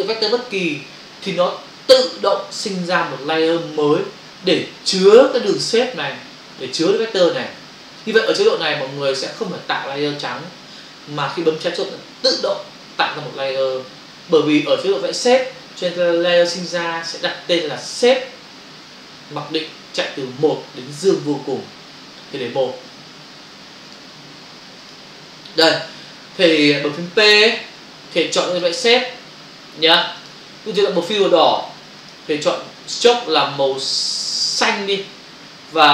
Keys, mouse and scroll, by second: 23.9 click, 28.5 click, 30.2 click, 31.9 click, 34.6 click.